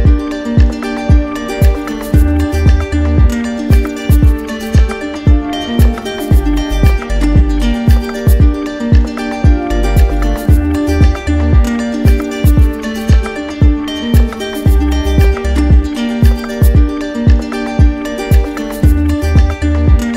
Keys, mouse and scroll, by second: 1.9 click, 2.2 shift+click, 2.9 alt+click, 3.5 click, 4.2 click, 8.9 click, 9.3 shift+click, 9.9 click, 10.3 click, 13.8 click, 14.4 click, 16.9-17.9 drag, 18.2-19.2 typing, 19.6 Return.